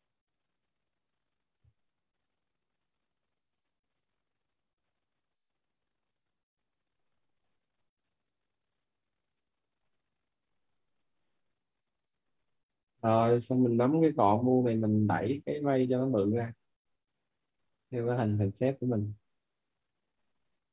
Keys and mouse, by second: 0.2 ctrl+z, 0.5 click, 4.3 click, 9.0 right click, 11.4 right click, 12.0-13.3 typing, 13.5 right click, 14.7 click.